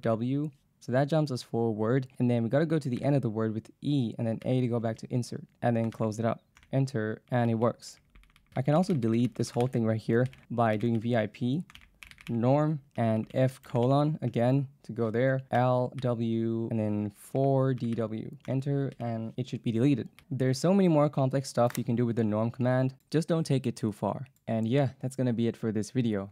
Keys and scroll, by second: 0.1 w, 3.0 e, 4.5 a, 6.0 shift+], 6.6 Return, 8.2-14.3 typing, 10.3 ctrl+c, 15.6 l, 16.0 w, 17.1-18.5 typing, 19.0 ctrl+c.